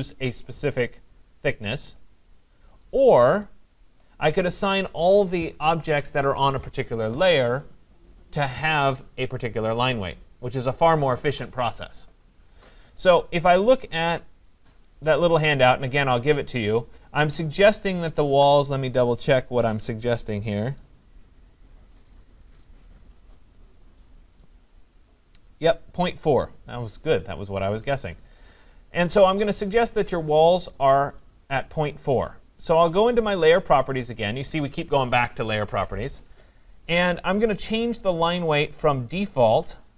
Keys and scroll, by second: 5.8 Escape.